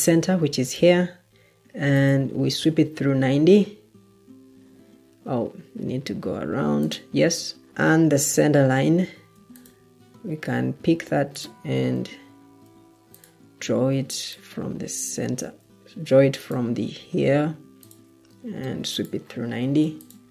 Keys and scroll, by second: 12.6 Escape, 15.5 Escape.